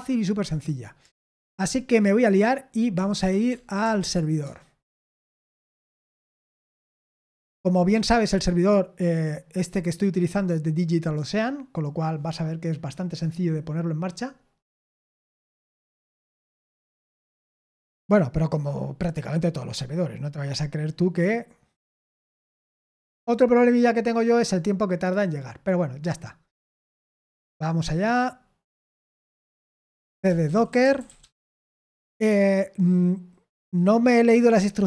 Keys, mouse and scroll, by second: 1.1 super+l, 2.6-4.4 typing, 29.3 ctrl+l, 29.8-31.6 typing.